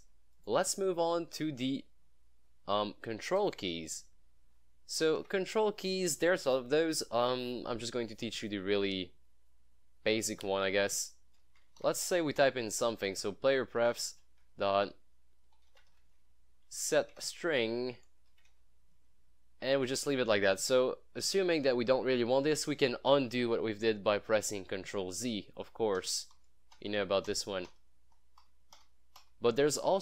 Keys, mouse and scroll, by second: 0.4 click, 1.4 click, 3.5 click, 5.2 click, 5.3 Tab, 11.4-12.7 typing, 13.1 Down, 13.9 Tab, 14.0 ., 15.4-16.5 typing, 16.7 Down, 17.2 Tab, 18.1-19.1 typing, 25.7 ctrl+z, 29.4 ctrl+z.